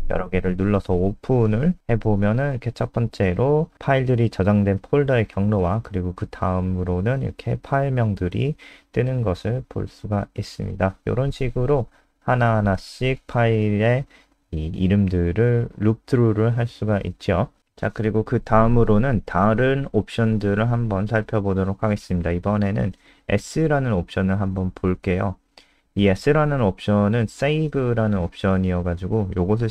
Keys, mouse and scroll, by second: 13.1-13.7 scroll down 5, 13.7 click, 15.5 Up, 15.6 Up, 16.1 Down, 16.5 Up, 16.8 ctrl+shift+End, 17.3 Delete, 18.2 Return, 18.3-23.6 typing, 25.7 Return, 26.5 ctrl+z, 26.8 Return, 27.4-29.7 typing.